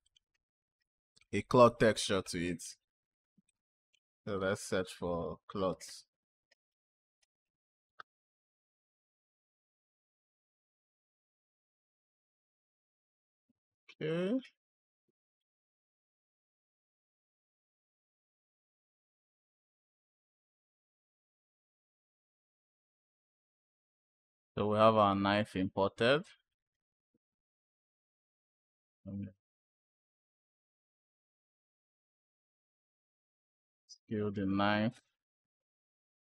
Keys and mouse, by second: 1.0-8.7 drag, 17.9 click, 20.7 click, 22.4 click, 22.6-23.0 drag, 24.2 click, 24.9 click, 26.3 click, 27.9 click, 28.6 shift+click, 29.3 click, 30.2 click, 31.2 click, 32.9 s, 34.3 click, 35.3 click.